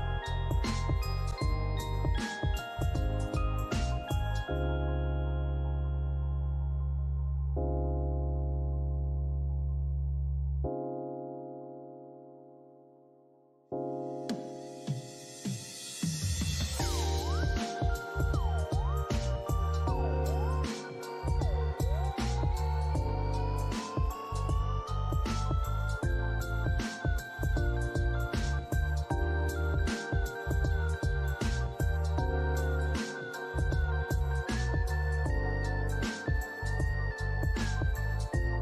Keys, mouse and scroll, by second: 3.2 alt+middle click, 3.8 scroll down 1, 4.4 alt+click, 12.7 scroll down 1, 14.4 alt+middle click, 14.7 alt+click, 15.6 alt+click, 18.3 alt+middle click, 18.9 alt+click, 21.0 alt+middle click, 21.7 double click, 22.1 alt+click, 22.5 alt+middle click, 22.9 right click, 27.3 ctrl+z, 27.7 scroll up 1, 28.0 alt+click, 28.6 alt+click.